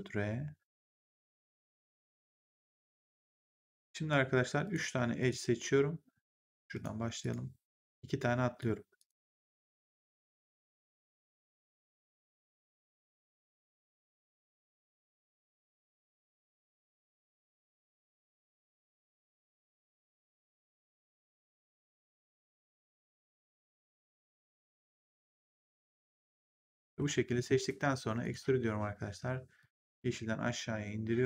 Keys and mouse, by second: 1.6 click, 3.0 click, 4.5 click, 5.1 shift+click, 6.6 click, 7.1 shift+click, 12.6 shift+click, 19.0 shift+click, 20.9 shift+click, 23.2 shift+click, 25.1 shift+click, 28.1 click, 29.5 click.